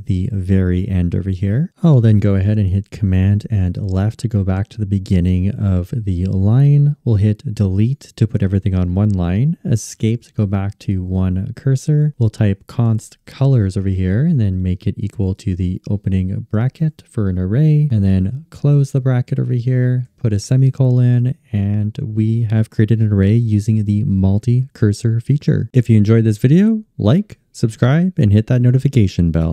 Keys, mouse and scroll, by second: 2.6 super+Left, 6.9 BackSpace, 9.6 Escape.